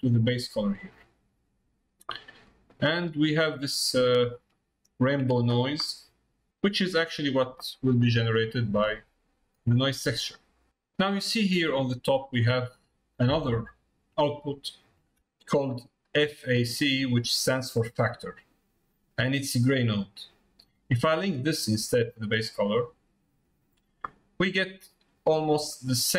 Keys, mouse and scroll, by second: 2.5 middle click, 3.6 middle click, 4.5 shift+middle click, 5.0 shift+middle click, 5.9 middle click, 8.1 click, 21.6-23.3 drag, 25.2-26.1 drag.